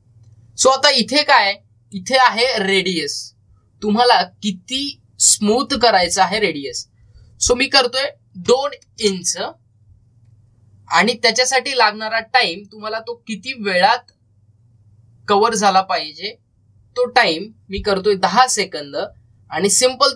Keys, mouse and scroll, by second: 2.2-5.1 drag, 12.3-19.9 drag, 19.9 scroll up 1.